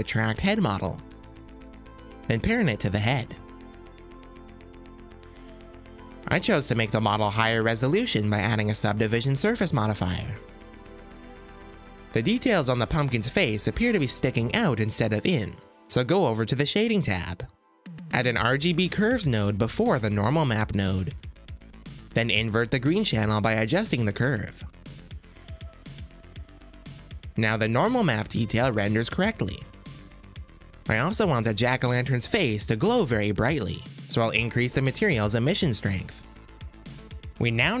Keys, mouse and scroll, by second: 0.6 click, 0.9 click, 1.6 s, 3.1 shift+click, 4.0 ctrl+p, 5.0-7.4 drag, 6.9 z, 10.9 click, 12.1 click, 12.8 click, 13.2-15.1 middle drag, 17.1 click, 17.6 click, 18.1 click, 18.9 click, 19.4 shift+a, 23.8 click, 24.8 click, 26.3 click, 28.8 click, 29.6 m, 30.1 m, 30.7 m, 31.4 m, 31.9 click, 32.1 middle click, 32.5 click, 33.4-36.1 drag, 36.6-37.8 middle drag.